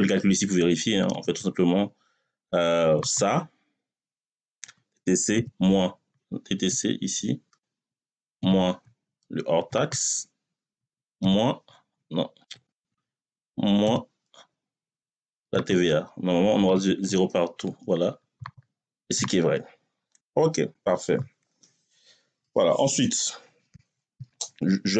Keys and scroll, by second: 0.9 =, 5.2 6, 6.5 BackSpace, 8.2 6, 11.0 6, 12.3 BackSpace, 13.7 6, 16.5 Return.